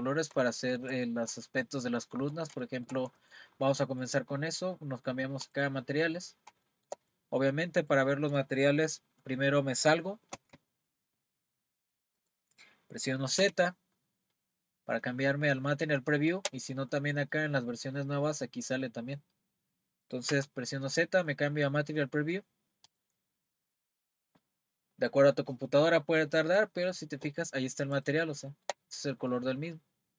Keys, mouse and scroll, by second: 3.2 click, 5.5 click, 6.2-6.5 scroll down 1, 6.7-11.4 shift+middle drag, 11.4 Tab, 12.2 click, 13.4 z, 20.3 z, 26.9 click, 27.5-27.9 scroll up 1, 28.1-30.1 shift+middle drag.